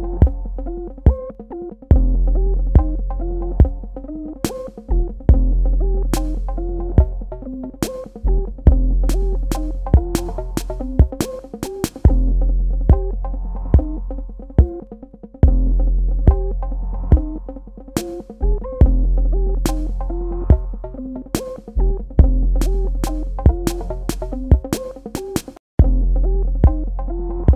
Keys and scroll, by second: 3.3 space, 13.0 space, 15.8 v, 16.8 space, 18.9 space.